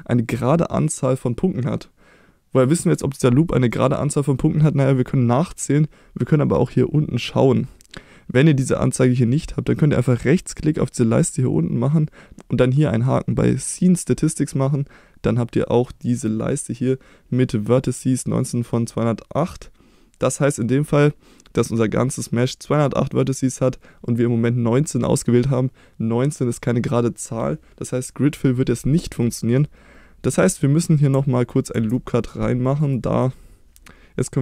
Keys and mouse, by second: 3.8 middle click, 11.2-15.4 right drag, 29.2 middle click.